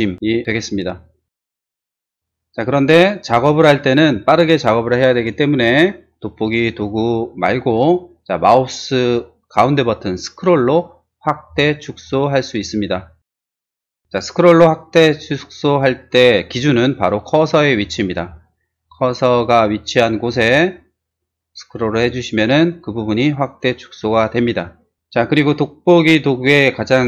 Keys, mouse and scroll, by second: 3.3 space, 11.2 middle click, 11.6 middle click, 11.7 scroll up 1, 12.0-12.9 scroll down 2, 13.3 middle click, 13.4 middle click, 17.8 middle click, 18.0 middle click, 18.2 middle click, 18.5 middle click, 18.8 middle click, 19.0 middle click, 19.4-19.7 scroll down 1, 20.2-20.8 scroll up 3, 21.2-22.4 scroll down 4, 22.6-23.0 scroll down 2.